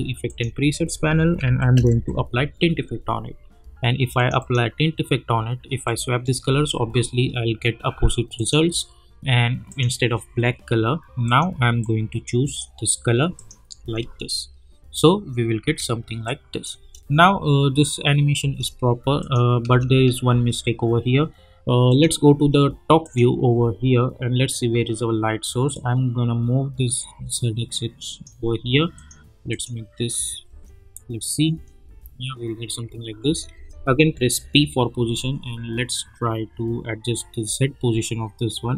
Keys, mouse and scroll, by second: 1.0-2.4 typing, 4.1 click, 6.4 space, 8.3-13.3 drag, 13.8 space, 16.2 click, 16.8 space, 19.2 click, 19.7 space, 21.9 click, 23.1 click, 23.8-25.6 scroll down 1, 25.7-28.9 drag, 30.5 space, 32.0 scroll up 1, 33.2 space, 34.3 p, 35.2-38.7 drag.